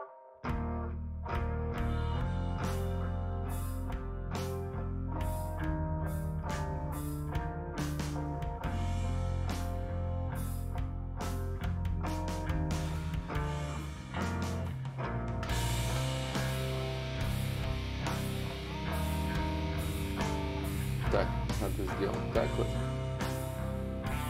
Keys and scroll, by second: 14.2 ctrl+z, 15.5 ctrl+z, 15.7 ctrl+z, 16.2 ctrl+z, 16.6 ctrl+z, 17.0 ctrl+z, 17.4 ctrl+z, 17.4 y, 17.8 ctrl+z, 17.8 y.